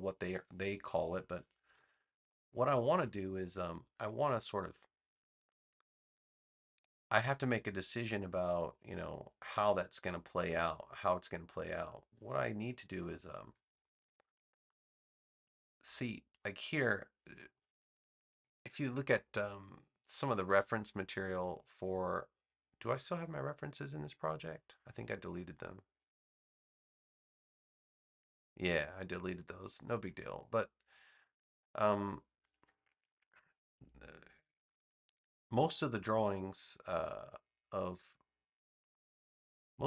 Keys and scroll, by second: 1.6 v.